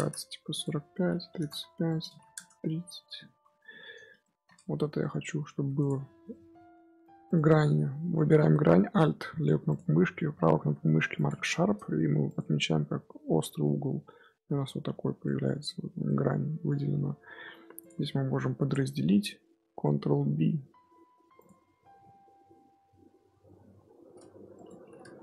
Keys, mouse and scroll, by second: 4.1 shift+middle drag, 4.4 scroll down 1, 4.5-5.3 scroll up 5, 4.7 Tab, 5.3 2, 5.7 alt+click, 6.2 middle click, 7.2-11.6 right drag, 11.6 scroll down 1, 11.8 scroll up 1, 12.0 Tab, 12.2 click, 12.3 scroll down 1, 12.3-14.7 middle drag, 14.7-15.2 scroll up 2, 15.2-15.7 middle drag, 15.7 scroll up 1, 15.7 scroll down 1, 16.0-16.4 middle drag, 16.4 scroll down 1, 16.4 scroll up 1, 16.6 scroll down 1, 16.7-17.1 middle drag, 17.1 Tab, 17.3 2, 17.7 alt+click, 18.0 middle click, 19.0-19.9 scroll up 2, 20.0 ctrl+b, 21.4 Tab, 21.8 scroll down 1, 21.9 middle click, 22.6 Tab, 23.1 scroll up 1, 23.4 Tab, 24.5-25.2 drag.